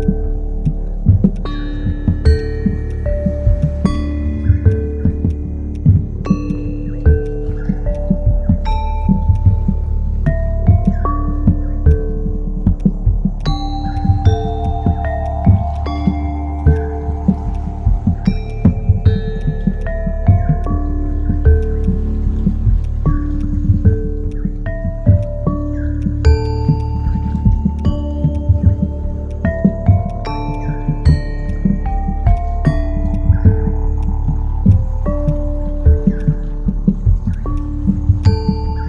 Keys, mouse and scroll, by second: 16.6 typing, 29.4 typing, 31.4-32.7 typing, 37.1-38.8 typing.